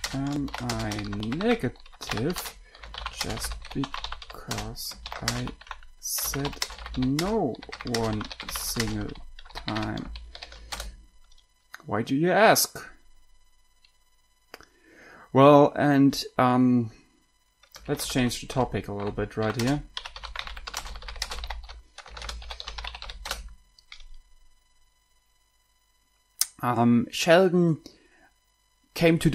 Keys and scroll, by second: 0.0-10.7 typing, 11.0 Return, 18.0-23.9 typing.